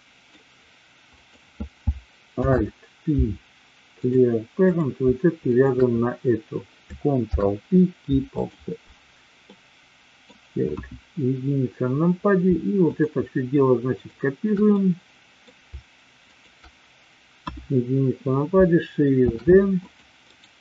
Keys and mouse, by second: 1.1 click, 2.3 alt+p, 4.6 click, 5.5 shift+click, 7.2 ctrl+p, 9.3 middle click, 10.6 KP_1, 12.9 shift+click, 13.9 shift+click, 14.7 middle click, 16.2 shift+click, 17.3 KP_1, 19.1 shift+d, 19.7 click, 20.2-20.6 right drag.